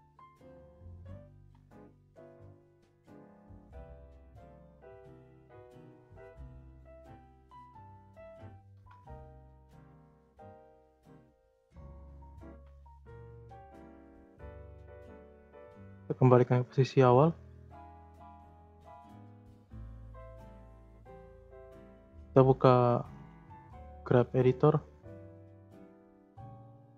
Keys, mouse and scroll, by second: 0.3 click, 0.6 scroll up 1, 0.7-1.3 middle drag, 1.3 g, 3.8-5.0 drag, 5.7 a, 7.3-8.7 drag, 8.7 Delete, 9.6 click, 9.9 click, 10.1 scroll down 3, 10.4-10.8 middle drag, 11.9-12.7 shift+middle drag, 12.7 scroll down 3, 13.1 middle drag, 13.4-14.3 scroll up 12, 13.7-14.0 shift+middle drag, 14.3-14.7 middle drag, 14.7 g, 18.5-20.3 drag, 20.3-23.1 shift+middle drag, 23.1-26.1 drag.